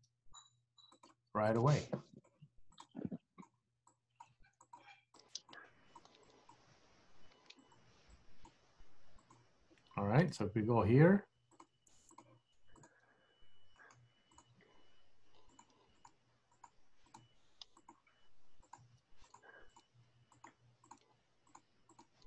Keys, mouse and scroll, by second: 1.6 click, 1.8 g, 2.8 click, 2.9 g, 3.9 click, 4.3 g, 5.2 click, 5.6 g, 6.3 click, 6.6 g, 8.2 click, 8.6 g, 10.5 KP_1, 11.6 click, 11.9 g, 12.9 click, 12.9 g, 14.4 click, 14.7 g, 16.0 click, 16.3 g, 17.2 click, 17.3 g, 18.8 click, 18.9 g, 19.8 click, 19.9 g, 20.9 click, 21.2 g, 22.0 click, 22.2 g.